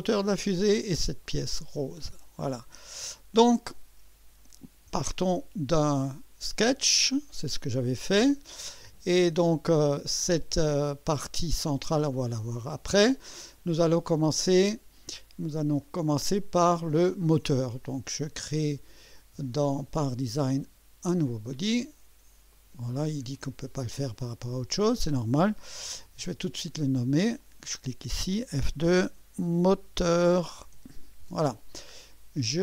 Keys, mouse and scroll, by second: 2.5 click, 5.3 click, 9.8 click, 11.8 space, 12.0 space, 15.8 click, 21.1 click, 22.5 click, 23.3 click, 26.6 click, 27.4 click, 28.5 F2, 29.2-31.4 typing.